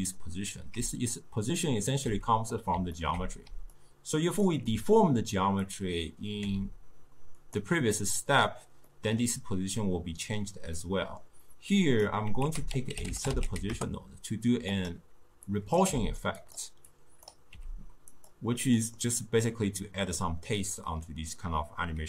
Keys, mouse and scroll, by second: 0.8 d, 0.9-2.0 drag, 2.0 d, 2.2 d, 2.4-3.6 middle drag, 3.6 d, 3.7 click, 4.5 d, 4.5 d, 5.7 click, 6.5 g, 9.0-11.8 middle drag, 11.8 drag, 12.5 ctrl+a, 15.5-15.9 drag, 15.9 g, 17.0 click, 17.6 g, 18.7-21.7 middle drag.